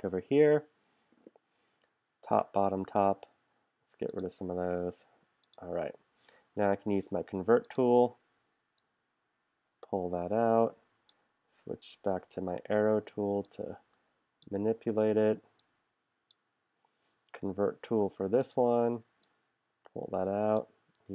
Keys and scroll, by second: 6.8 shift+c, 12.4 a, 17.9 shift+c.